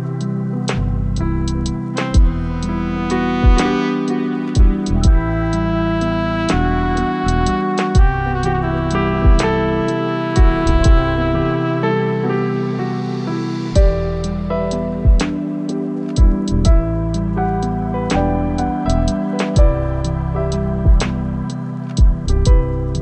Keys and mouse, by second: 1.1 click, 3.3 click, 4.5 click, 6.6 click, 9.4 ctrl+z, 9.6 ctrl+z, 12.0 click, 13.3-14.3 drag, 14.7-15.8 drag, 16.1 ctrl+z, 16.7 click, 18.8 middle click, 19.6 middle click, 20.1 ctrl+z, 20.3 ctrl+z, 22.8 click.